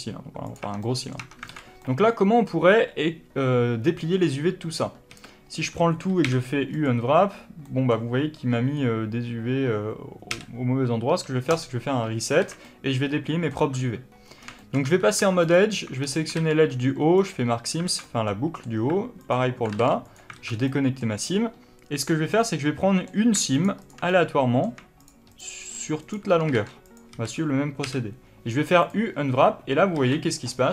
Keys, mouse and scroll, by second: 0.4 click, 0.5 Tab, 0.7-7.6 middle drag, 1.1 Tab, 1.4 alt+a, 5.0 a, 5.4-6.2 scroll up 2, 6.2 u, 10.2 u, 12.3 alt+a, 12.6 middle click, 13.6 1, 14.2 scroll up 1, 14.3-15.3 shift+middle drag, 14.7 2, 15.3 alt+click, 15.9-16.2 scroll down 1, 16.2 ctrl+e, 17.4-17.8 scroll down 1, 17.8 alt+a, 17.9-19.1 middle drag, 19.1 alt+click, 19.7 ctrl+e, 20.2 alt+a, 20.4 scroll down 1, 20.6-21.9 middle drag, 21.2-21.9 scroll up 1, 21.9 click, 22.2-23.5 middle drag, 23.5 shift+click, 23.7 shift+click, 24.0 middle click, 24.9 shift+click, 25.2 shift+click, 25.6 shift+click, 25.9 shift+click, 26.5 ctrl+e, 27.0 a, 29.9 alt+a, 30.3-30.7 scroll up 1.